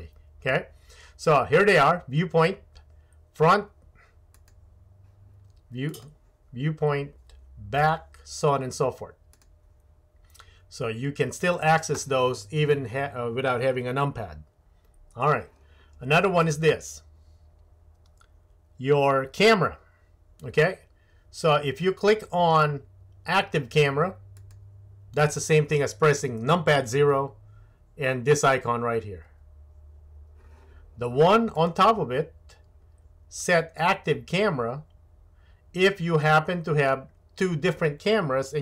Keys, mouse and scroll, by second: 9.4-11.5 drag, 19.0-38.6 drag.